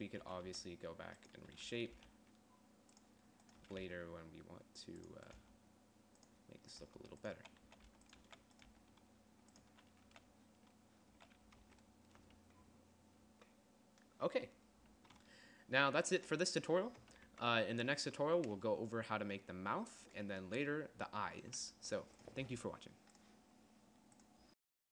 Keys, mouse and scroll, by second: 0.0-1.0 typing, 2.3 z, 2.5 g, 3.9 click, 4.2 z, 4.3 g, 5.9 g, 7.4-10.6 typing, 11.7 z, 12.2 Tab, 17.8 a.